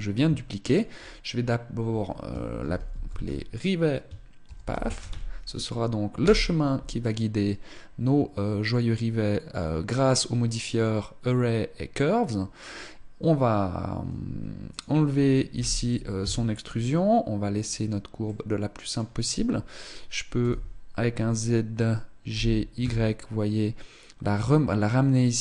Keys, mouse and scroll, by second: 0.3 ctrl+click, 9.5 scroll up 1, 14.4 click, 17.3-17.6 scroll up 1, 17.8 middle click, 20.1 z, 22.0 g.